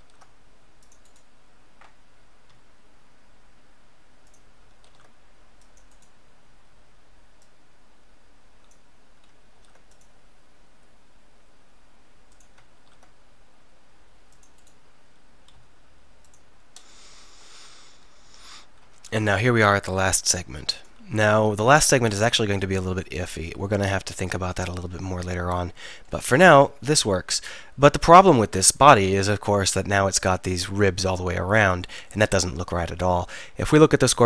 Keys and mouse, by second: 0.0 ctrl+r, 1.2-2.5 drag, 2.5 s, 4.4 click, 4.9 ctrl+r, 6.0 click, 9.6 ctrl+r, 12.4 click, 12.8 ctrl+r, 14.2 click, 14.7 click, 15.6 s, 19.0 ctrl+r, 21.4 ctrl+r, 23.8 s, 29.5-32.1 middle drag.